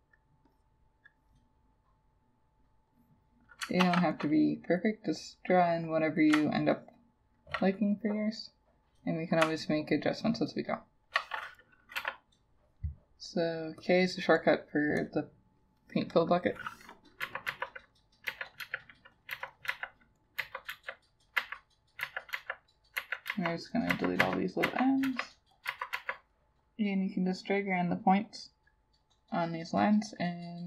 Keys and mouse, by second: 3.9 ctrl+z, 6.8 ctrl+click, 9.7 ctrl+click, 10.7 ctrl+click, 12.0 k, 17.3 Delete, 17.5 Delete, 18.3 Delete, 18.6 Delete, 19.4 Delete, 19.7 Delete, 20.4 Delete, 20.7 Delete, 21.4 Delete, 22.1 Delete, 22.4 Delete, 23.6 Delete, 23.9 Delete, 24.2 Delete, 24.7 Delete, 25.1 Delete, 25.7 Delete, 26.0 Delete.